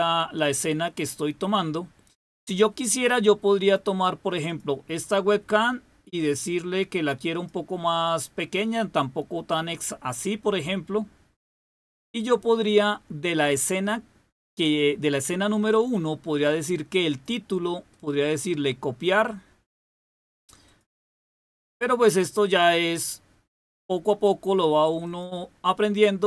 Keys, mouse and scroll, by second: 3.5 click, 4.4 click, 6.1-7.4 drag, 7.8-11.8 drag, 13.3 click, 16.9 click, 17.8 right click, 20.5 click, 23.4 click, 24.9 click.